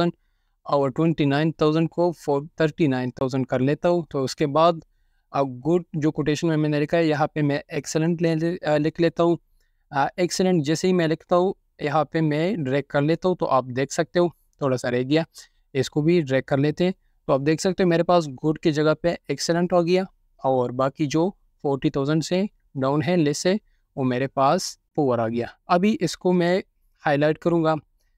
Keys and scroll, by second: 0.9-1.3 typing, 5.6 BackSpace, 6.5 3, 10.0-12.9 typing, 13.0 Return.